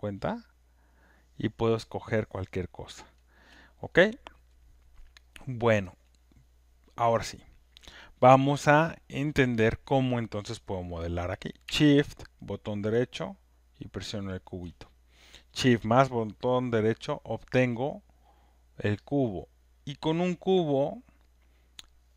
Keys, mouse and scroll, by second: 0.0-3.5 typing, 3.1 click, 14.3-19.4 shift+right drag.